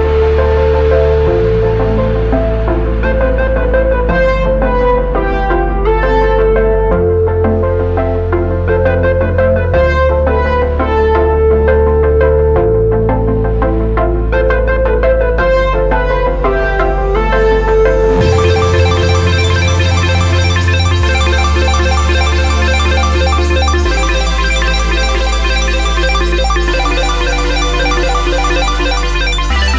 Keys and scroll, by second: 2.5 ctrl+c, 16.0 ctrl+u, 21.6 f, 22.1 alt+d, 22.6-24.3 typing, 26.8 Return.